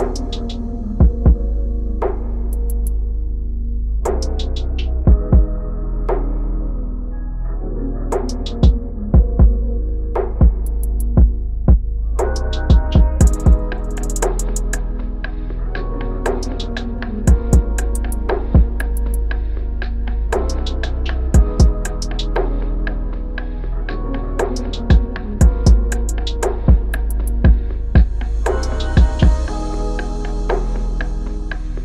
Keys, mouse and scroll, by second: 21.0 double click, 23.5 shift+Down, 24.0 shift+Down, 28.0 shift+Down, 29.1 shift+Up, 29.7 Down, 30.1 Down.